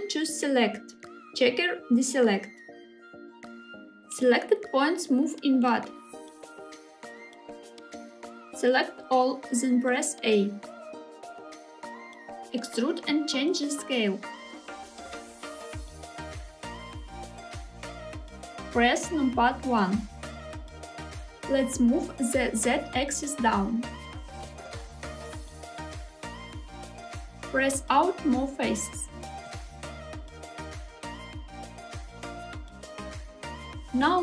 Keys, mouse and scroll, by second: 0.5-2.9 drag, 4.3 s, 7.5 click, 10.8 a, 12.9 e, 14.2 s, 16.7 click, 17.3 shift+middle click, 20.3 KP_1, 22.7 g, 23.7 z, 26.5 click, 27.9 middle click, 28.1 KP_7, 29.0 e, 29.7 s, 33.0 click, 33.6 scroll up 2, 33.9 2.